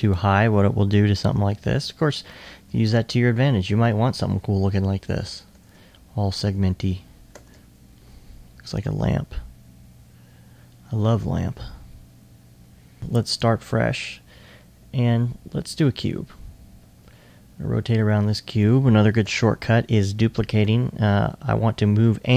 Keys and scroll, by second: 20.7 e.